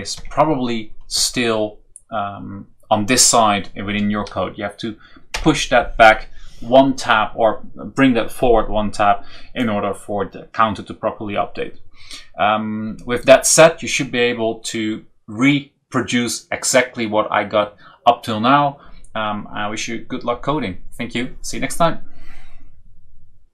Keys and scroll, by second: 0.1 Tab, 5.3 BackSpace.